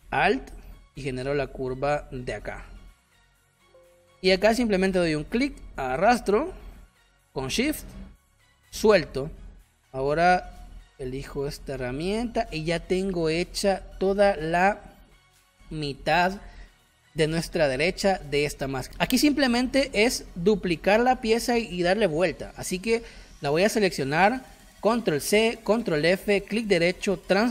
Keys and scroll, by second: 2.3 space, 3.5 space, 10.6 v, 12.0 space, 13.7 space, 25.2 ctrl+c, 25.7 ctrl+f.